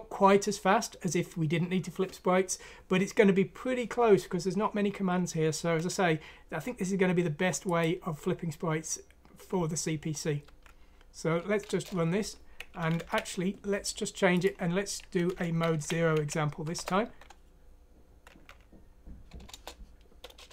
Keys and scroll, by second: 10.4 F9, 11.6 Return, 13.0 ctrl+Home, 15.3 Home, 16.1 ;, 18.4 F9, 19.5 Return.